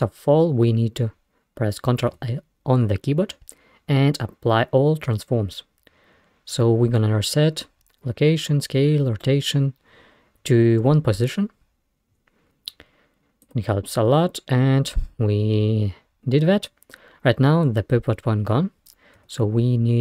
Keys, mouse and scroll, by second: 2.1 ctrl+a, 19.2 Tab.